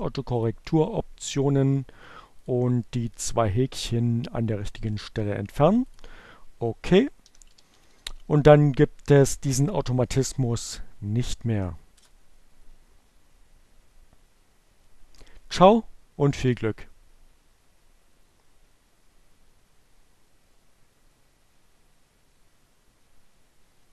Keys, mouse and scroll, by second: 1.9 click, 2.4 click, 4.7 click, 5.7-7.0 typing.